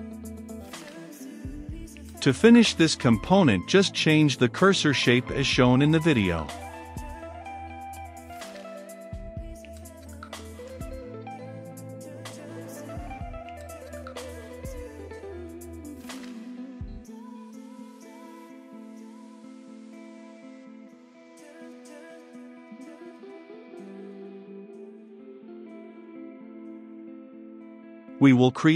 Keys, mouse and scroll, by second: 6.7-7.4 scroll down 2, 7.4 click, 8.5-10.5 typing, 11.4-24.9 drag, 26.3-28.7 drag.